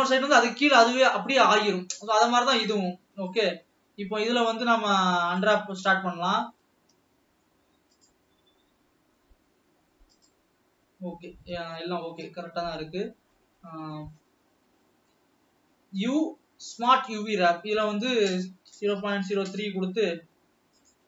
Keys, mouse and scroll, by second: 2.0 scroll down 5, 2.3-3.5 shift+middle drag, 5.4-5.8 shift+middle drag, 5.8 scroll up 3, 6.5-6.8 scroll down 2, 6.8-8.3 middle drag, 10.2-10.9 middle drag, 10.9 scroll down 2, 11.8 shift+middle click, 12.4-13.0 scroll up 7, 13.3-14.3 middle drag, 14.3 scroll up 1, 14.8 shift+middle click, 15.3 scroll down 2.